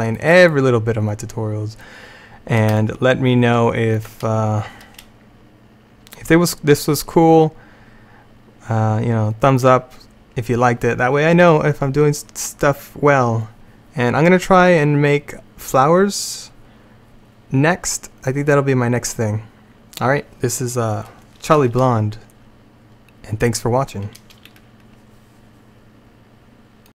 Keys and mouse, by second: 0.1 middle click, 2.9 middle click, 3.2 middle click.